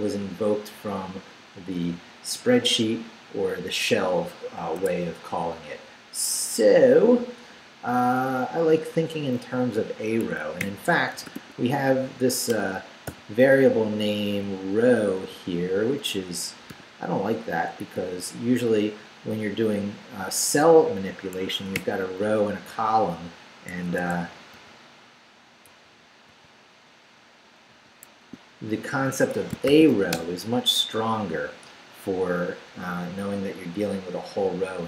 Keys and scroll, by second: 4.8 Escape, 7.2 Up, 10.6-11.9 typing, 12.5 Return, 13.1 n, 16.7 i, 18.5 Down, 20.3 Up, 21.5 Escape, 21.8 /, 23.7 Escape, 24.1 n, 27.7 i, 28.1 a, 29.1 Escape, 29.4-30.4 typing.